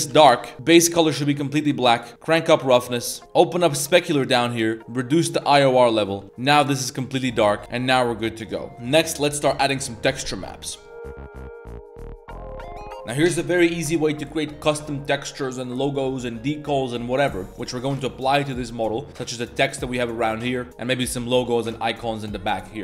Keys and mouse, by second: 2.1 click, 3.1 middle click, 3.7 click, 4.0 middle click, 5.0 click, 6.1 middle click, 6.3-7.5 middle drag, 6.3 a, 7.6-8.4 middle drag, 8.8 middle click, 10.9 middle click, 16.1 middle click, 16.7-18.8 middle drag, 20.3 middle drag, 20.8 middle click, 21.5 middle drag.